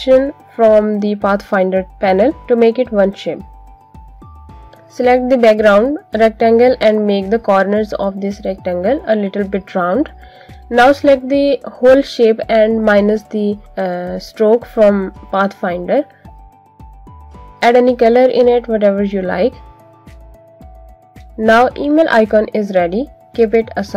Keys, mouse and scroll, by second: 2.1 click, 6.0 click, 8.0 click, 15.6 click, 18.1 click.